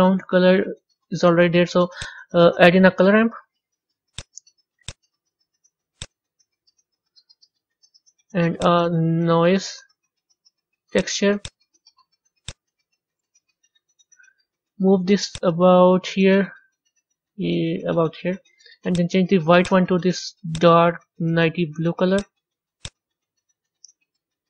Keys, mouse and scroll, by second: 7.2-13.4 middle drag, 13.4 click, 15.3-19.2 drag, 20.4 click.